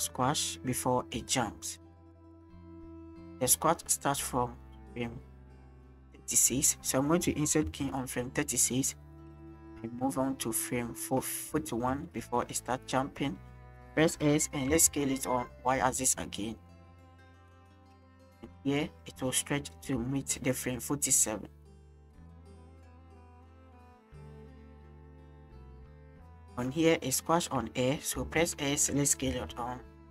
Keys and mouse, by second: 1.8-6.8 drag, 7.6 i, 8.9-11.1 drag, 12.0 shift+click, 13.8 s, 14.7 y, 17.0 click, 17.9-18.4 drag, 19.8 click, 22.2 click, 22.9-26.4 drag, 26.9 shift+drag, 27.3 shift+drag, 28.3 s, 29.3 y.